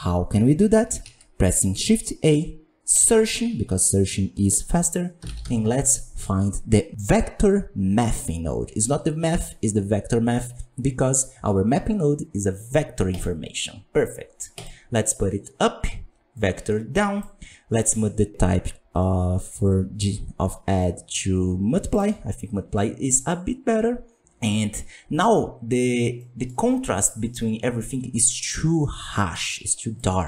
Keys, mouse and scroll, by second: 14.9-16.3 scroll up 3, 16.3-17.2 drag, 17.7-21.9 drag, 23.2-25.8 drag, 25.8-26.1 scroll up 4, 26.1-26.7 middle drag, 26.7-27.2 scroll up 7.